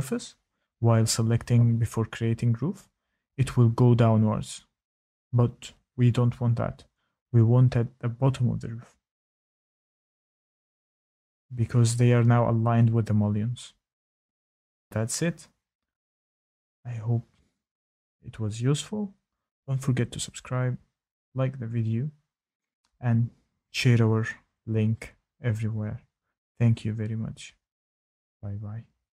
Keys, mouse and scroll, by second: 0.5 click, 1.5 click, 2.9 click, 3.9 click, 4.9 click, 7.4 ctrl+z, 8.7 click, 9.3 click, 10.8 click, 11.6 click, 13.1-13.6 scroll.